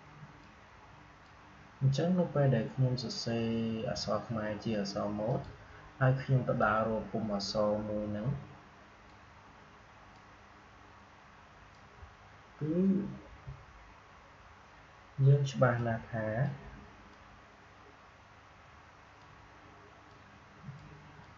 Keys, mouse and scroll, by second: 5.2-15.7 drag, 15.7-21.3 drag.